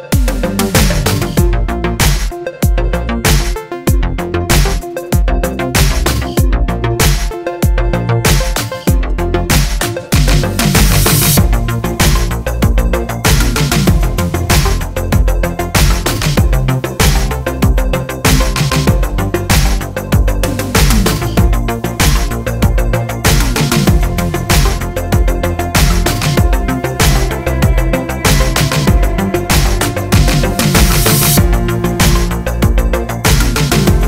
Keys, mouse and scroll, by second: 0.5-2.4 middle drag, 0.5 scroll down 1, 1.7 g, 2.4 s, 3.5 click, 3.6 middle click, 4.0 scroll down 1, 4.4 ctrl+r, 7.3 middle click, 7.8 Tab.